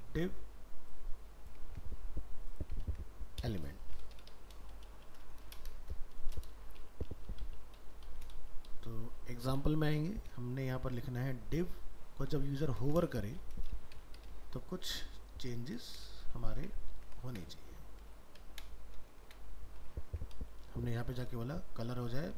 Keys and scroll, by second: 1.7 ctrl+c, 2.9 ctrl+v.